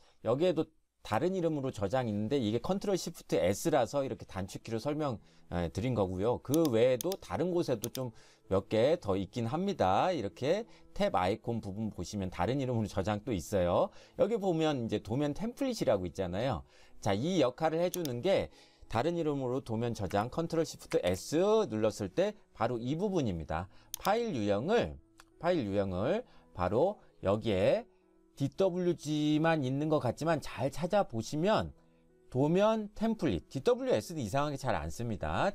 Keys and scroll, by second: 21.0 ctrl+shift+s.